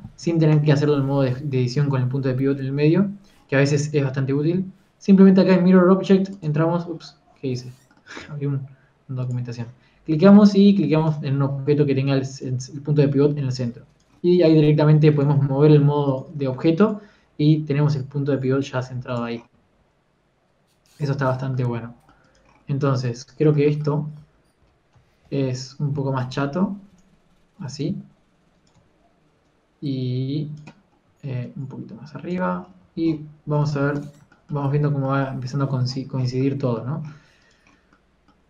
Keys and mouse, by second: 1.6 Tab, 2.0 Tab, 7.5-9.1 middle drag, 10.4-12.2 drag, 13.4-14.6 right drag, 14.6 click, 15.2 right click, 15.6 g, 16.6 g, 17.5 g, 18.7 g, 20.7 g, 22.3 a, 23.3 click, 24.2 Tab, 24.6 middle click, 25.2 a, 25.8 a, 25.8 s, 26.7 s, 30.9 Tab, 30.9 r, 33.5 a, 34.9 ctrl+s.